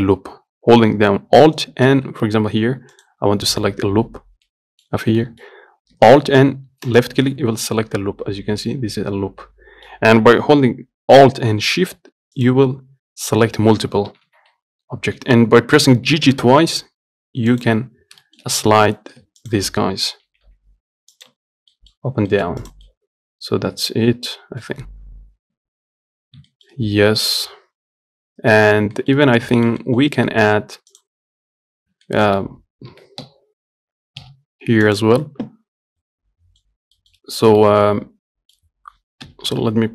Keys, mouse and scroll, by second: 3.2 click, 4.7-7.2 middle drag, 7.2 alt+click, 8.0-12.6 middle drag, 12.6 alt+shift+click, 14.3 g, 18.2-18.5 scroll down 1, 18.5 shift+middle click, 18.8 scroll up 1, 19.1 shift+middle click, 19.7 alt+click, 20.5 g, 21.6 Tab, 21.7 scroll down 3, 22.0 middle click, 22.4 scroll down 1, 22.6 shift+middle click, 22.9 click, 23.1-25.9 middle drag, 26.7-29.5 shift+middle drag, 29.5-29.8 scroll up 1, 29.8-31.2 shift+middle drag, 31.2 click, 32.3 shift+middle click, 33.1 g, 36.3-39.5 middle drag, 39.5 KP_1.